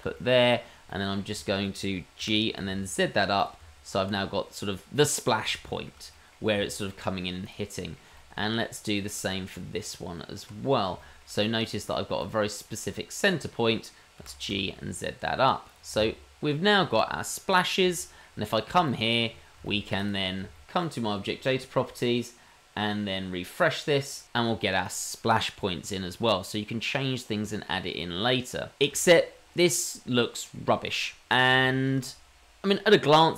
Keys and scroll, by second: 2.2 g, 3.6 Tab, 9.5 Tab, 11.2 Tab, 14.2 g, 16.0 Tab.